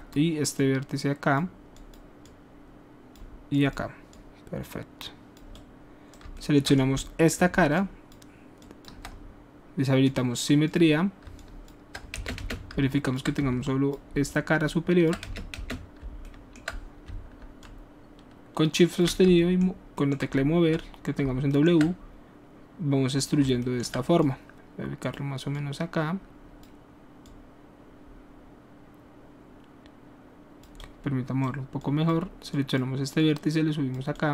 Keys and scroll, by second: 12.1 ctrl+space, 12.7 ctrl+alt+space, 13.4 ctrl+alt+space, 15.2 space, 15.5 space, 19.2 space.